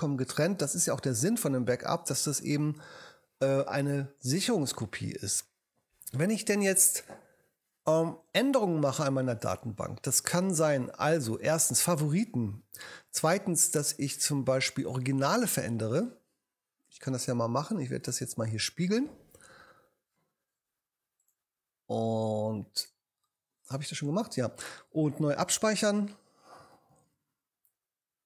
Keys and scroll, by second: 25.5 ctrl+alt+super+e, 26.9 ctrl+alt+super+s, 28.1 ctrl+super+s.